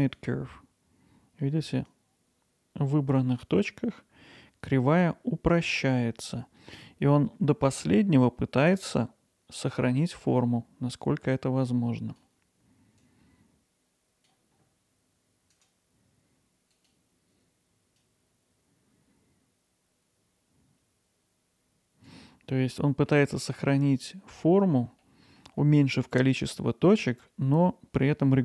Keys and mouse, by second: 2.0-15.6 drag, 15.6-18.1 right drag, 18.1-23.1 drag, 24.1 middle click, 25.0 middle click, 28.0 middle click.